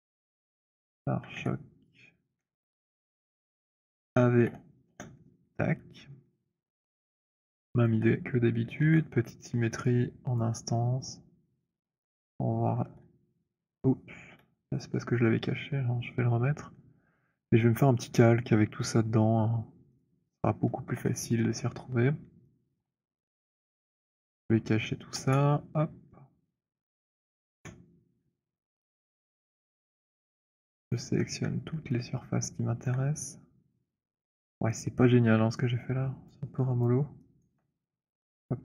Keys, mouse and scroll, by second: 0.0-4.3 typing, 4.8 Return, 7.3 alt+click, 8.2 alt+click, 8.7 ctrl+shift+d, 10.2 alt+click, 11.7 click, 12.6 ctrl+shift+d, 14.1 Delete, 16.7-17.2 scroll, 18.0-19.3 scroll, 20.0 click, 20.9 h, 22.5 alt+click, 23.6 alt+click, 24.4 click, 26.4 middle click, 27.4 middle click, 28.3 click, 29.5 alt+click, 30.0 shift+click, 31.1 alt+click, 31.4-32.0 scroll, 32.8 alt+click, 34.0 shift+click, 36.3 alt+click, 37.0 alt+click, 37.6 alt+middle click, 38.1 shift+click.